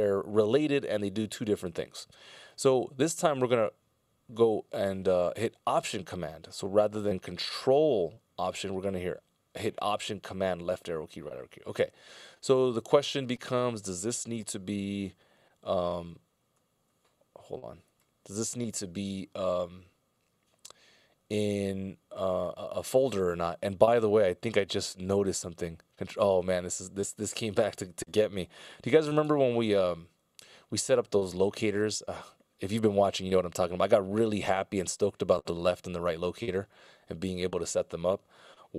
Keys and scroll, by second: 16.3 alt+super+Left.